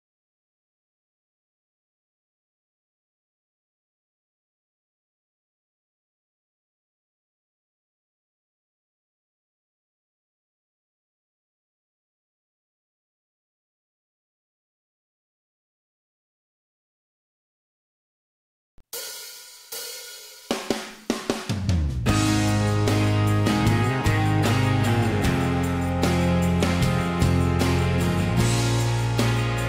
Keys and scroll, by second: 0.5 ctrl+z, 1.7 m, 4.8-6.2 typing, 8.3 Delete, 9.1 Delete, 10.1 Delete, 10.5 Delete, 11.9 Delete, 13.0 p, 20.2 Escape, 20.3 Escape, 20.4 Escape, 23.6 m, 27.6 e, 28.0 p, 29.1-29.6 Escape.